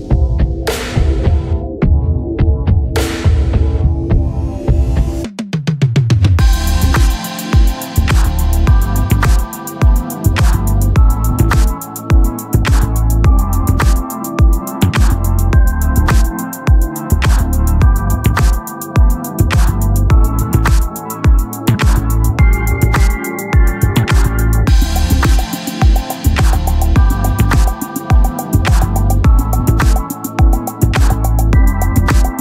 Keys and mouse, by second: 4.4 click, 6.3 click, 15.5 click, 20.4 click, 26.4 ctrl+=.